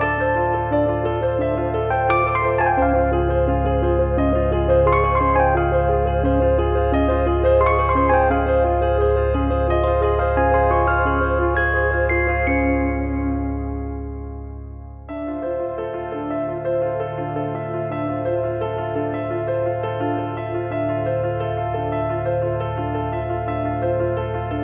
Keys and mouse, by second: 0.2 click, 0.9 click, 1.7 click, 5.4 middle click, 6.1 alt+z, 8.9 click, 9.1 middle click, 11.4 e, 14.4 shift+r, 15.0 click, 15.4 alt+z, 15.9 click, 16.4 alt+z, 16.8 alt+z, 16.9 click, 21.3 click, 23.6 click.